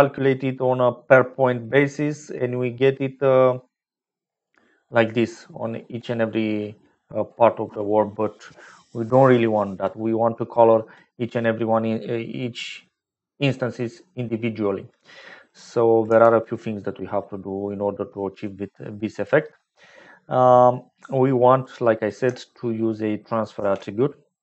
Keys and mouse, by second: 11.0-12.5 drag, 16.1 typing, 18.5 click, 21.6 click, 23.5 shift+a.